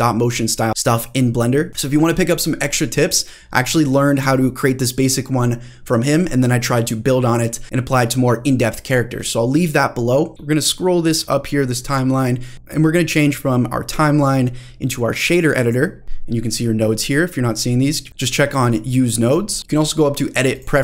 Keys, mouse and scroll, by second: 10.3-11.9 drag, 13.9-14.5 drag, 15.2 click, 16.0 middle click, 16.3-16.8 scroll up 3, 16.8 middle click, 18.1 click, 19.5 click, 19.6 middle click, 19.7-20.8 drag.